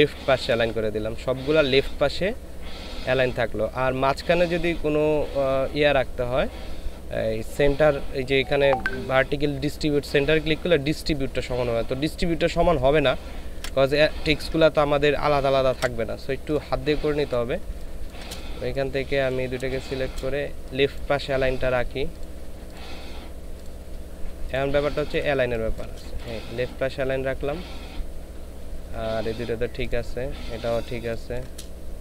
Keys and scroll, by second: 13.5 ctrl+z, 15.7 ctrl+z, 17.6 ctrl+space, 19.6 ctrl+space, 24.8 ctrl+space, 25.4 ctrl+space, 30.9 ctrl+space.